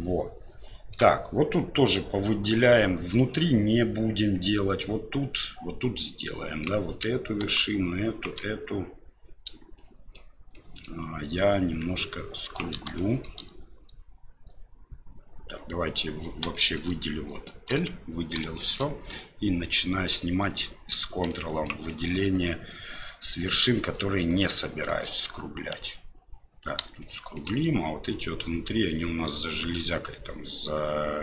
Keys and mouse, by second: 6.0 click, 7.3 ctrl+click, 8.1 ctrl+click, 9.7 shift+click, 10.5 shift+middle click, 11.5-12.6 shift+drag, 12.9 shift+middle click, 16.5 shift+middle click, 18.1 l, 18.5 middle click, 21.5 ctrl+click, 24.4 shift+middle click, 27.0 shift+middle click, 28.1-29.2 ctrl+drag.